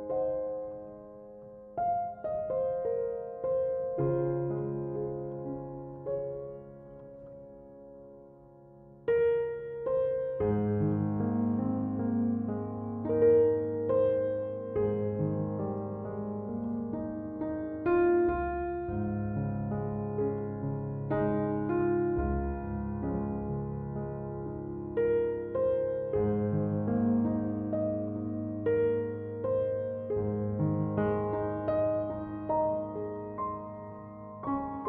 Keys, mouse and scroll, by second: 2.7 click, 4.4-6.1 drag, 9.4 click, 15.5-18.5 drag, 20.0-23.1 drag, 24.0-26.4 middle drag, 26.4 click, 27.9-30.9 drag, 31.1-34.1 drag.